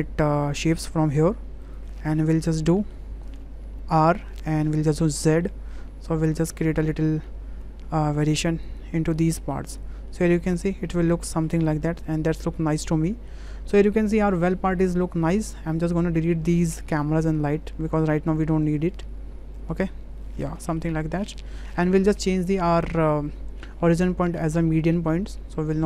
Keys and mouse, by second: 2.1 middle drag, 2.8 shift+middle click, 3.9 r, 9.2-9.5 middle drag, 9.7 click, 10.1-11.4 middle drag, 11.8-13.2 middle drag, 14.0-14.5 middle drag, 15.2 middle click, 15.7-16.3 drag, 18.3 drag, 18.7 click, 19.2 Delete, 19.5 click, 19.9 Delete, 20.2-20.7 drag, 21.2 shift+click, 22.3-24.9 drag, 25.7 click.